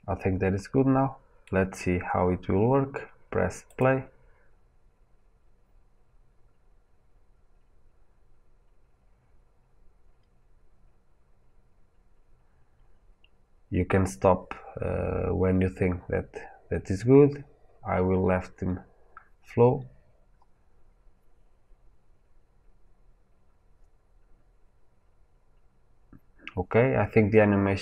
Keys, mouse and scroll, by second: 3.7-22.8 drag.